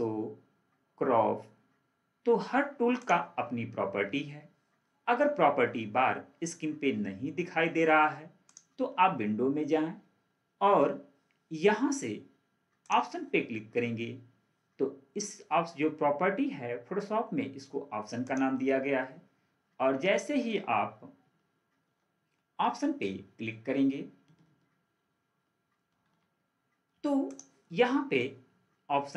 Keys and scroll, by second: 26.0 ctrl+4.